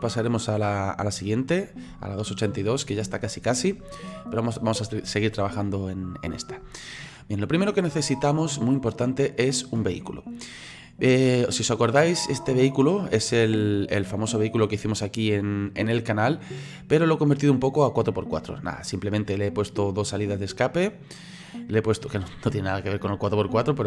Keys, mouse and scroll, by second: 11.5-14.1 middle drag, 14.1 click, 14.9-23.8 middle drag.